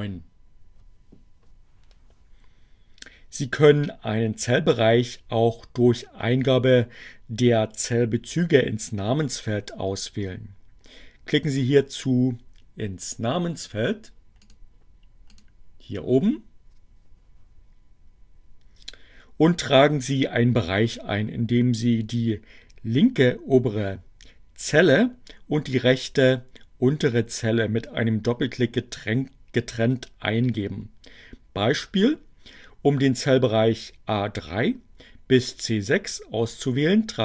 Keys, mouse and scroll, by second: 15.5 click, 16.2 click.